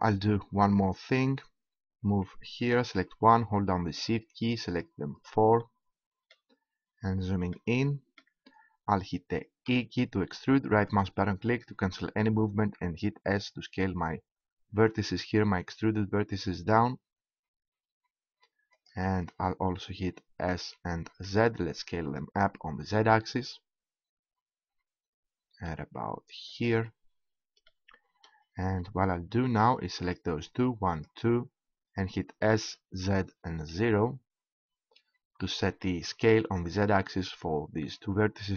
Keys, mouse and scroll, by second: 2.6-5.6 right drag, 5.6-8.2 middle drag, 9.4-10.8 middle drag, 10.8 e, 12.2-13.6 right drag, 13.6 s, 15.4 middle click, 20.2 click, 20.5 s, 26.7-29.2 drag, 29.2-30.9 middle drag, 30.9-33.6 drag, 33.6 s.